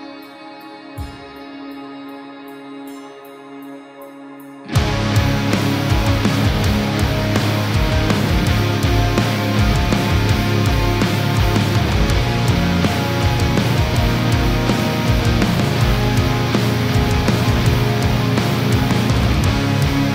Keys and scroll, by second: 12.8 space.